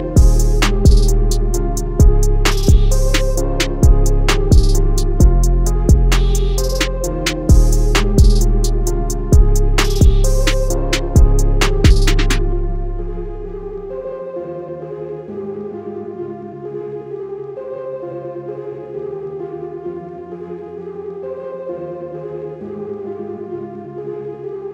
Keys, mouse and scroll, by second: 4.3 click, 7.0 Escape, 7.8 click, 8.4 alt+scroll down 1, 9.5 alt+scroll up 1, 10.3 click, 18.1 ctrl+z, 21.0 click, 24.2 Escape.